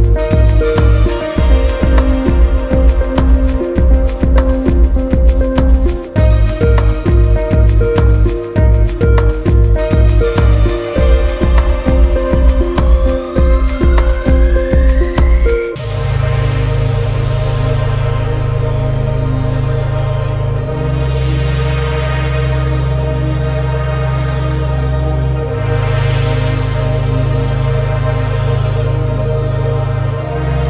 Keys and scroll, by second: 1.6 ctrl+alt+space, 2.8 ctrl+space, 3.7 ctrl+alt+space, 4.6 ctrl+alt+space, 5.3 ctrl+alt+space, 7.1 ctrl+alt+space, 7.7 ctrl+space, 12.6 ctrl+z, 13.3 ctrl+space, 14.2 ctrl+space, 15.2 ctrl+alt+space, 15.5 ctrl+2, 15.8 ctrl+space, 19.4 ctrl+alt+space, 21.4 ctrl+space, 22.2 ctrl+space, 22.8 ctrl+alt+space, 26.1 ctrl+z, 28.2 ctrl+space, 28.7 ctrl+alt+space, 29.1 ctrl+alt+space.